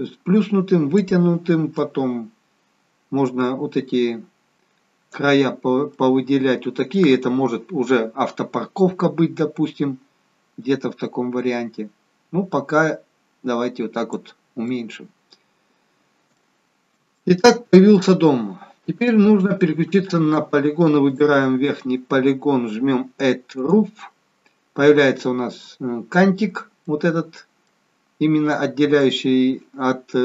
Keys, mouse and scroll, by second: 1.7 click, 5.9 middle click, 10.6 click, 14.6 middle click, 16.3 shift+middle click, 17.1 middle click, 19.0 middle click, 19.1 shift+middle click, 20.2 click, 21.0 click, 23.5 click, 24.4 middle click, 27.0 middle click, 28.1-28.5 scroll up 2, 28.5 middle click.